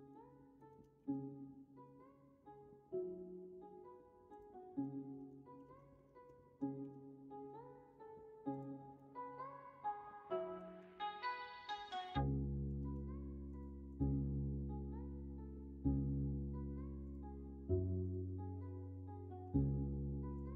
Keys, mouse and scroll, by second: 0.5 scroll up 1, 0.7 middle click, 0.7 scroll down 1, 0.9 shift+a, 4.8 middle click, 5.6 ctrl+z, 5.9 Tab, 6.8 shift+a, 9.0 middle click, 9.3 Tab, 11.2 ctrl+r, 12.8 ctrl+z, 14.2-20.5 drag.